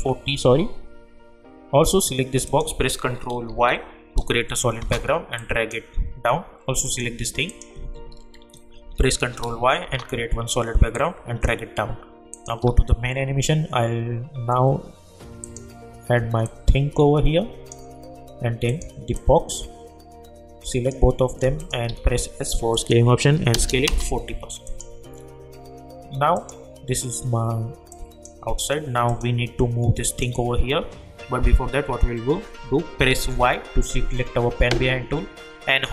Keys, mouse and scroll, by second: 1.8 click, 3.4 ctrl+y, 4.8 Return, 5.4-6.8 drag, 8.8 ctrl+y, 9.8 Return, 10.9-12.3 drag, 15.4-21.6 drag, 21.9 s, 22.7 click, 23.8 Return, 24.6 click, 33.3 y.